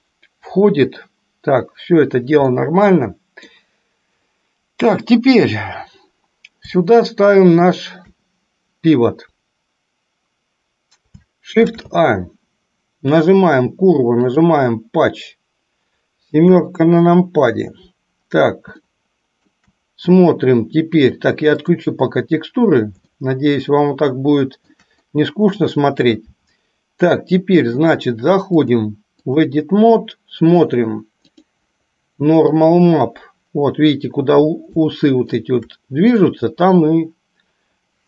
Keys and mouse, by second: 2.8-3.8 middle drag, 7.7 shift+right click, 11.7 shift+a, 16.6 KP_7, 19.1-20.0 shift+middle drag, 22.0 drag, 23.4-25.1 shift+middle drag, 28.8 click, 31.6-33.2 drag, 35.1 shift+middle click.